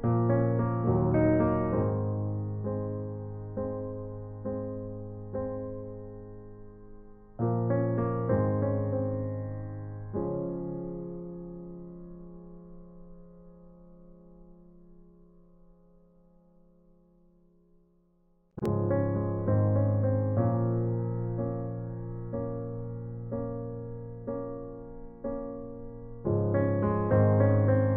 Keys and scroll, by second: 0.7-2.8 typing, 5.8 ctrl+alt+z, 26.5 ctrl+i.